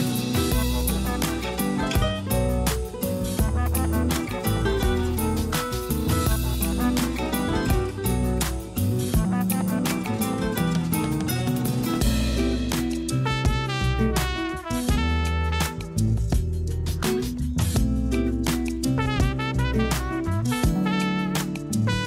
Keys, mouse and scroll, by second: 1.4 click, 4.6-7.6 drag, 10.4-10.9 scroll up 5, 11.8 Tab, 12.7 shift+middle click, 13.3-13.7 scroll up 3, 13.8 Tab, 15.2 click, 16.0 click, 16.4 Tab, 17.0 3, 17.5 click, 18.7 Tab, 19.3 shift+click, 20.0 shift+click.